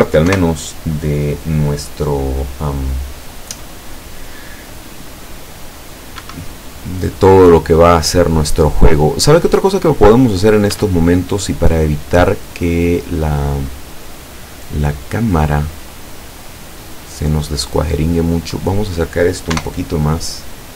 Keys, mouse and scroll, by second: 0.4 KP_0, 6.2 Escape, 7.0 scroll down 2, 7.9 middle click, 10.8 Tab, 11.2-12.1 drag, 12.4-12.7 scroll down 2, 13.5 right click, 14.0-15.3 middle drag, 16.0-17.3 drag, 17.7-19.1 drag, 19.6 KP_0.